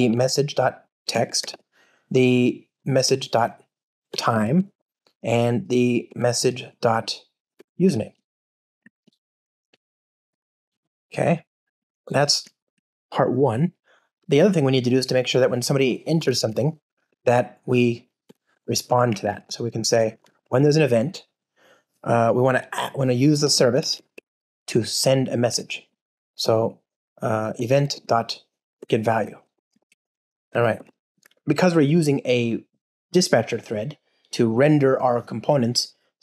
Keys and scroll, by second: 1.4 super+p, 3.0 Return, 7.8 Return, 11.8 alt+super+l, 12.6 super+BackSpace, 17.0 Return, 19.1 alt+BackSpace, 24.1 Return, 29.7 alt+super+l, 30.7 super+BackSpace.